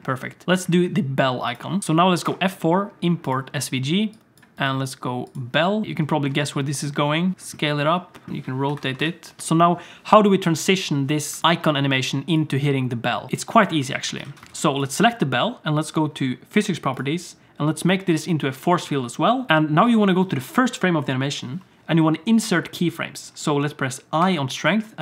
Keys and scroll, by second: 2.2 F4, 7.3 s, 8.3 r, 9.4 space, 11.4 alt+a, 11.4 ctrl+s, 13.9 ctrl+s, 14.2 alt+a, 14.5 ctrl+s.